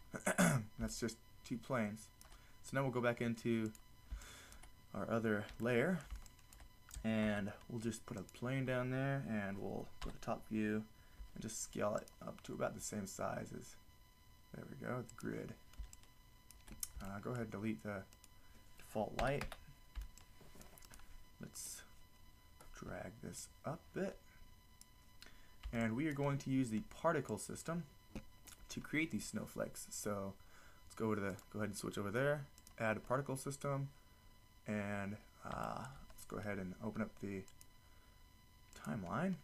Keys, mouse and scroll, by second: 3.9 drag, 5.1-5.6 middle drag, 7.2 shift+a, 10.1 KP_7, 11.2 s, 12.1-12.4 drag, 12.6 s, 15.3-17.3 middle drag, 19.2 Delete, 20.8-25.3 middle drag, 23.4-24.4 drag, 27.3 click, 37.5 click.